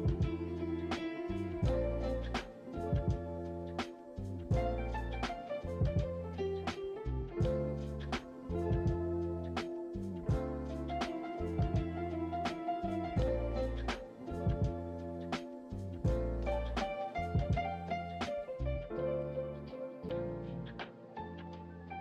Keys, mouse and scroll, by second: 0.3 g, 1.4 r, 1.9 s, 2.8 click, 3.6 click, 4.5 click, 4.9-5.3 scroll up 5, 5.6 middle click, 6.0-6.8 scroll up 1, 6.8 alt+click, 7.4 f, 7.5 click, 8.2 click, 9.1 i, 10.1 click, 10.8 ctrl+z, 11.1 click, 11.5 click, 12.7-14.9 drag, 15.8-17.1 drag, 17.1 i, 18.4 scroll down 2, 18.5 middle click, 19.2 scroll up 1, 19.9 click, 20.4 scroll down 3, 20.7-21.2 middle drag, 21.2 KP_1, 21.5-21.9 scroll down 2, 21.9 click.